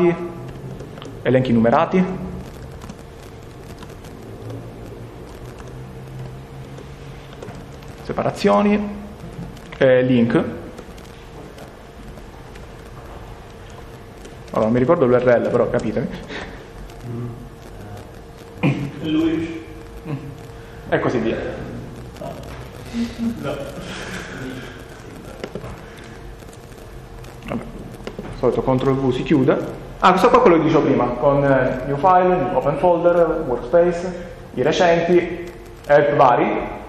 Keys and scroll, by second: 2.5-4.1 typing, 4.4 Return, 6.6 Return, 7.3 Return, 7.6 -, 7.7 -, 7.9 -, 8.4 Return, 11.9-13.6 typing, 14.8-16.7 typing, 24.0 ctrl+s.